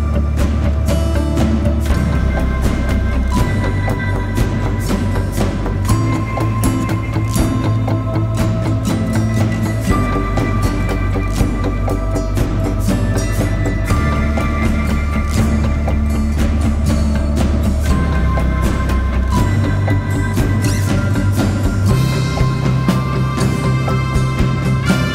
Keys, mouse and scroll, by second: 18.8-20.6 typing.